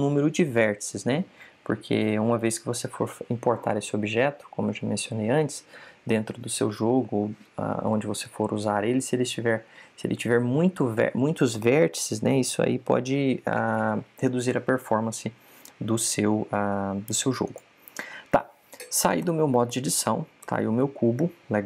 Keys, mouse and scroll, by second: 18.4 click, 20.1 a, 21.3 Tab.